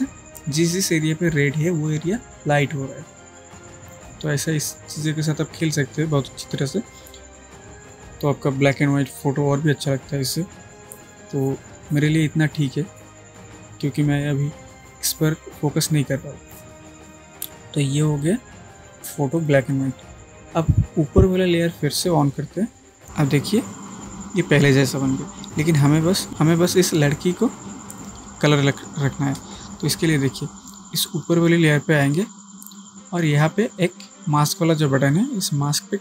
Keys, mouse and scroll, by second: 19.4 click, 31.2 click.